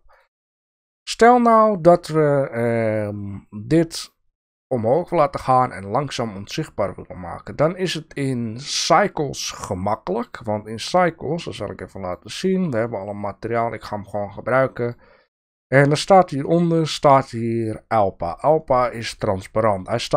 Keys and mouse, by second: 0.1 click, 10.0 click, 12.0 click, 14.5 click, 14.8 middle click.